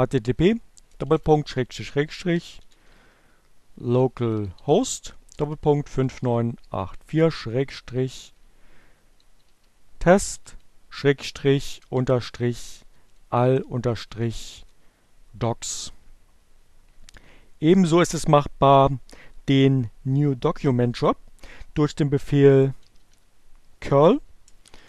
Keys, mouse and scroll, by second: 0.0-12.3 typing, 12.4 shift+Return, 20.1-21.0 typing, 22.9 space, 22.9 -, 24.4-24.8 typing.